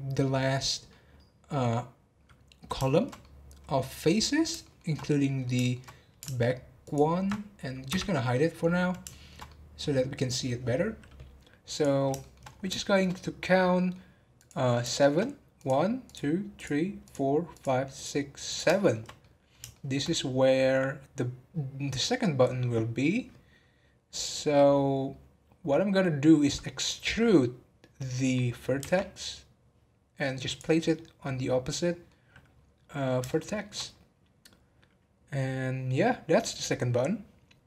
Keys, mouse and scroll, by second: 1.9 scroll up 1, 2.8-6.8 shift+middle drag, 6.8 alt+shift+click, 7.8 h, 8.3-11.7 middle drag, 11.7 click, 12.2 shift+middle click, 12.5 scroll up 3, 12.8-14.3 shift+middle drag, 14.3 click, 14.9 shift+middle click, 15.5 click, 16.0 click, 16.5 click, 17.0 click, 17.5 click, 17.9 click, 18.4 click, 18.8-23.2 shift+middle drag, 31.7 middle click, 32.2 scroll down 2, 33.3-35.0 shift+middle drag, 35.0 scroll up 1.